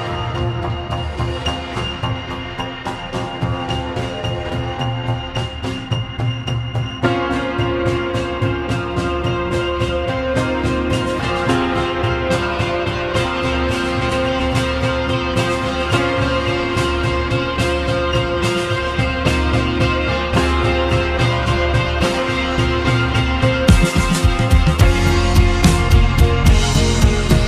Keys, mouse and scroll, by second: 0.6 s, 4.7-6.9 middle drag, 8.3 click, 8.6-9.4 scroll down 2, 10.3-11.0 scroll up 3, 13.8 s, 17.4 g, 21.8-22.4 scroll up 3, 22.4-25.0 shift+middle drag, 25.0 Tab, 25.7 Tab.